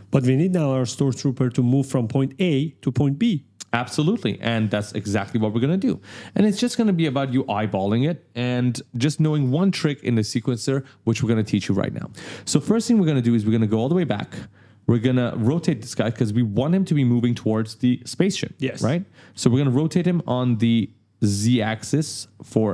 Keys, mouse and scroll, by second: 4.0 scroll up 1, 4.2-5.8 typing, 4.3 right click, 6.7 click, 13.3 click, 13.6-14.5 typing, 13.8 right click, 15.3 click, 15.6 right click, 18.1-18.9 typing, 18.1 right click, 21.1 click.